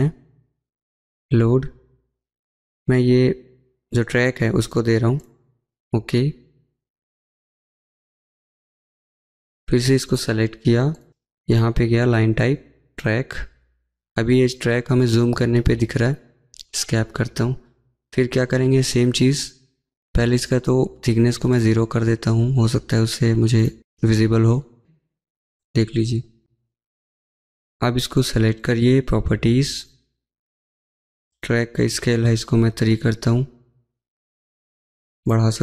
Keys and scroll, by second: 18.0 Escape, 18.2 Escape, 27.4 Escape, 33.2 typing, 33.3 Return.